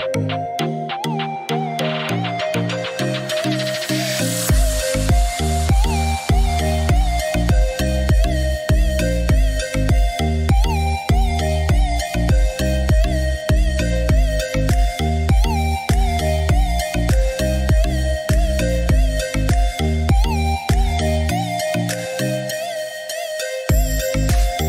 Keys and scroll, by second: 12.6 Escape, 16.1 Delete.